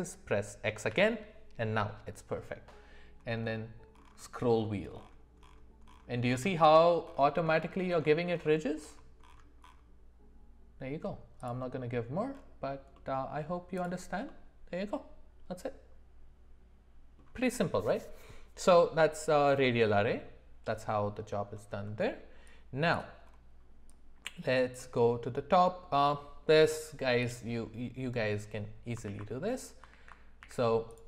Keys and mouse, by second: 12.9-13.5 middle drag, 13.8 click, 14.3-17.2 middle drag, 27.2 click, 29.1 alt+w, 29.9 alt+w, 30.4 w.